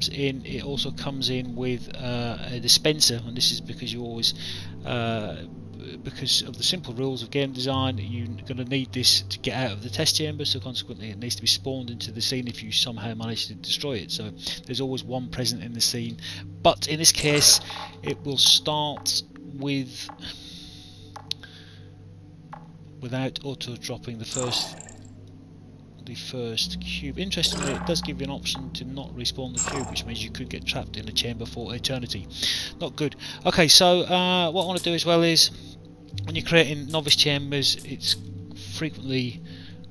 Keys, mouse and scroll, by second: 0.2 click, 0.7 alt+click, 2.7 alt+click, 7.0 alt+click, 12.6 alt+click, 14.4 alt+click, 15.7 alt+click, 17.0 right click, 24.1 click, 25.3 alt+click, 27.3 right click, 29.4 click, 29.9 alt+click, 31.1 alt+click, 34.5 click, 36.3 p, 36.8 click, 37.3 p, 37.7 click, 38.3 p, 39.7 alt+click.